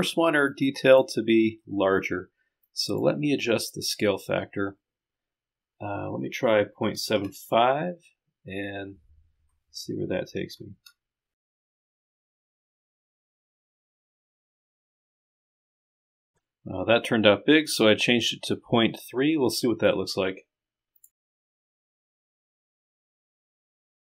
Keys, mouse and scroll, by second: 0.5 click, 6.9 KP_Decimal, 10.7 KP_7, 11.1 KP_5, 21.0 click, 21.1 Up, 22.4 click, 23.7 click.